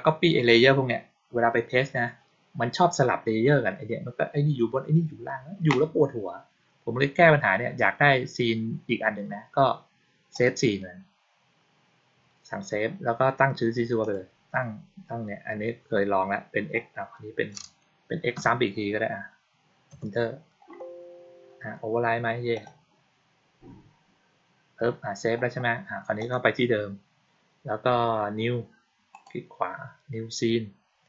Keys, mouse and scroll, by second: 10.2 click, 13.9 click, 22.4 click, 26.0 click, 29.0 right click.